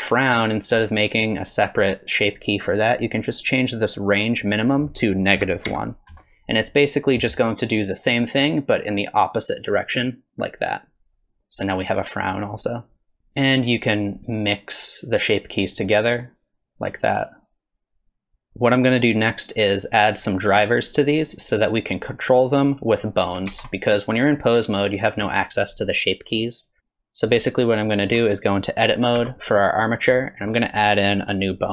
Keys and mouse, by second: 4.7-6.7 drag, 7.8-13.2 drag, 13.5 click, 15.0 click, 16.3-18.4 drag, 22.3 click, 23.5 ctrl+Tab, 26.8 KP_3, 27.4-28.1 shift+middle drag, 29.2 Tab, 30.2 shift+click.